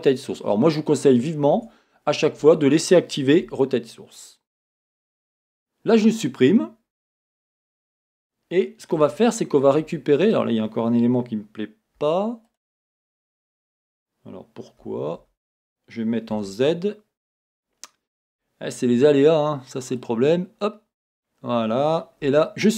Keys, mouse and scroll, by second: 1.6 Tab, 3.5 l, 6.9-8.2 scroll up 1, 9.0 Tab, 12.5 click, 13.7 Escape, 14.8 Escape, 22.3 x.